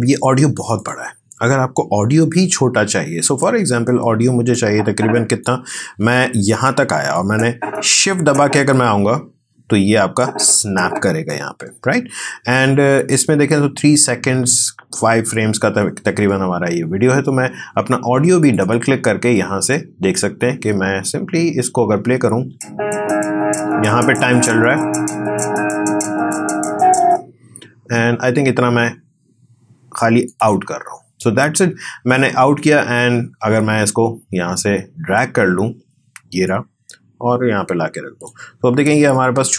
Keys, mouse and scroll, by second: 0.8 click, 4.5-7.1 drag, 7.1-18.4 drag, 22.4 space, 27.0 space, 30.2 click, 36.4-39.2 drag.